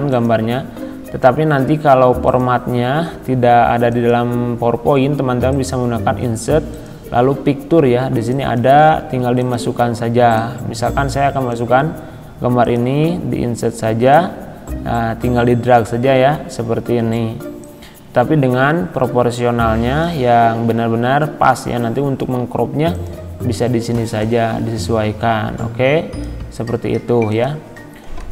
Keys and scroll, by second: 28.2 Delete.